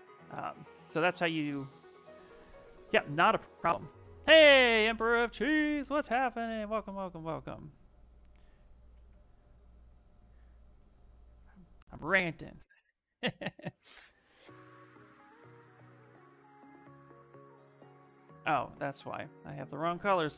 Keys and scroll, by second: 7.0 space, 13.5 shift+f, 13.9 shift+f, 17.0 space, 18.9 ctrl+z, 19.2 ctrl+z, 19.6 ctrl+z.